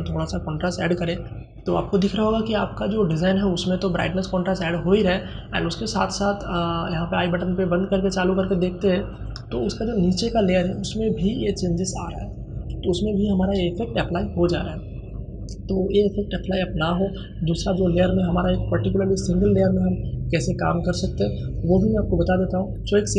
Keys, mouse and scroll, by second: 6.5 click.